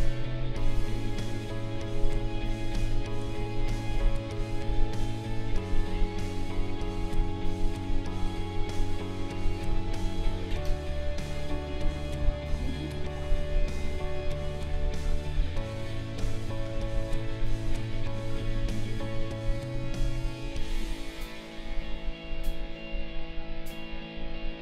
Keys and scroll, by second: 3.2 space.